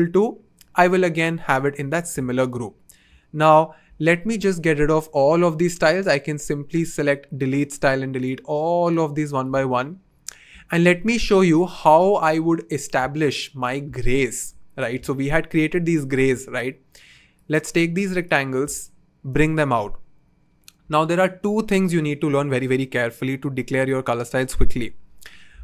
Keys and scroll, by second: 3.0 BackSpace.